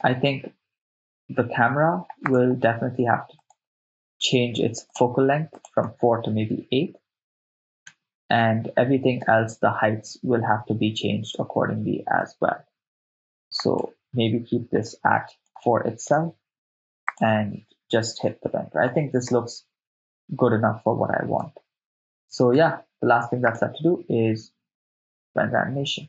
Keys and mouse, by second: 0.0 shift+space, 2.3 click, 3.5 click, 3.5 right click, 4.9-5.3 drag, 5.6-7.7 drag, 7.9 shift+space, 9.3 shift+space, 11.4 shift+space, 12.3 shift+space, 13.5-15.7 drag, 16.1 4, 16.7 Return, 17.1-18.4 drag, 19.3 shift+space, 21.5 shift+space, 22.3 shift+space, 22.6 shift+space, 23.4-25.6 drag.